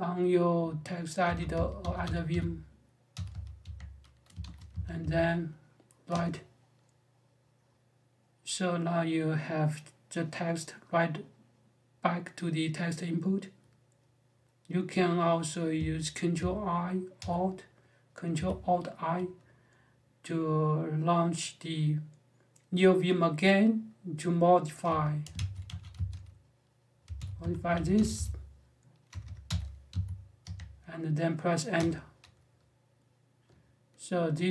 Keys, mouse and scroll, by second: 1.0-5.2 typing, 5.9 Return, 16.9 ctrl+alt+i, 24.4-29.7 typing, 30.2 Escape, 31.5 Return, 34.3 Escape.